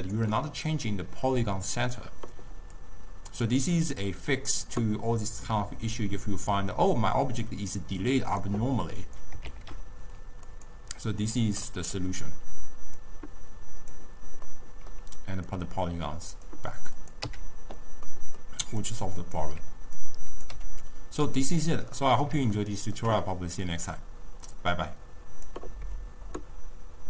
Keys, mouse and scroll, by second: 2.9-3.7 drag, 3.9-9.3 drag, 9.9 shift+d, 11.8 middle click, 12.2-12.5 scroll up 2, 12.5 scroll down 1, 13.1 click, 14.5 scroll down 1, 14.6-15.7 middle drag, 15.7-17.2 drag, 17.2-17.8 scroll down 1, 17.8 x, 17.8 scroll up 2, 18.1 scroll down 1, 18.3-19.0 middle drag, 19.0 click, 20.2 click, 20.6 g, 21.7 drag, 22.1-23.9 middle drag, 23.9-26.9 drag.